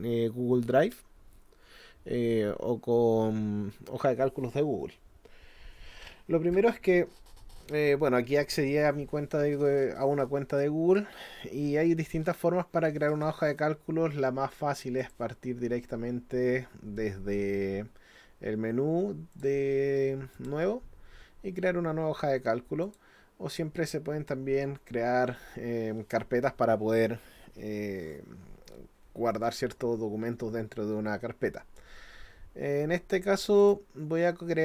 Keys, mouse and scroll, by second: 15.0 click, 19.3 click, 20.4 click, 22.8 click, 33.6 click.